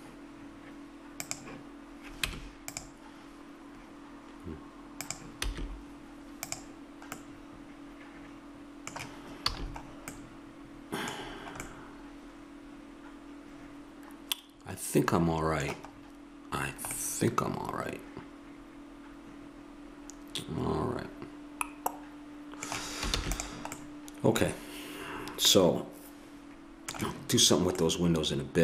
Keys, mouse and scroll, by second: 2.3 Tab, 4.9-6.9 drag, 5.5 z, 7.2 middle click, 8.3 middle click, 9.4 a, 10.1-12.6 middle drag, 15.9 middle click, 17.0-18.8 middle drag, 22.2 middle click, 23.1 ctrl+s, 27.8-28.6 middle drag.